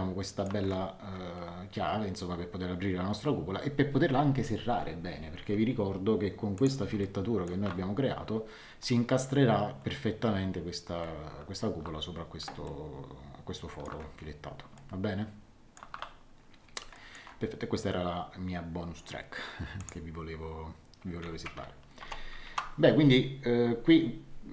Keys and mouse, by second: 6.5 click, 7.0 middle click, 12.6 shift+middle click, 14.7 shift+middle click, 16.9 middle click, 19.8 click, 22.0 ctrl+1.